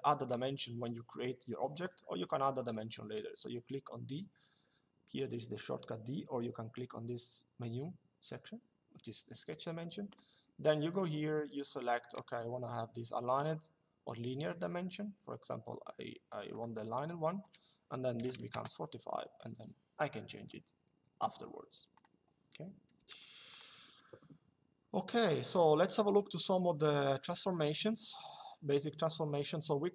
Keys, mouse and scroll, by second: 9.8 click, 16.3 click, 17.9 KP_4, 19.9 Escape, 21.6 click, 23.2 click, 24.8 click.